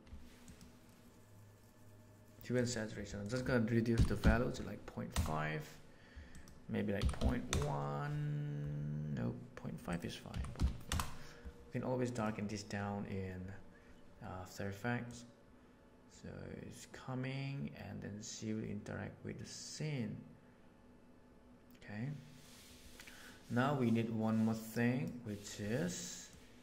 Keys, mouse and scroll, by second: 3.3-7.0 drag, 10.9 click, 15.0-15.6 drag, 24.1 click, 26.2-26.6 drag.